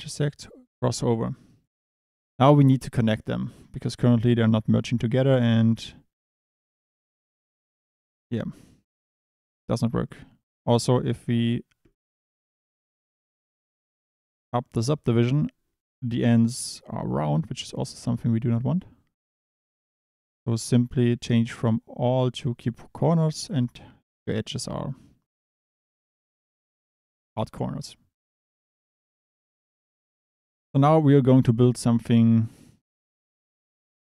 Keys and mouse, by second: 1.1 drag, 2.1 Tab, 3.2 click, 11.8 click, 13.7 click, 21.6-22.7 drag, 32.9 click.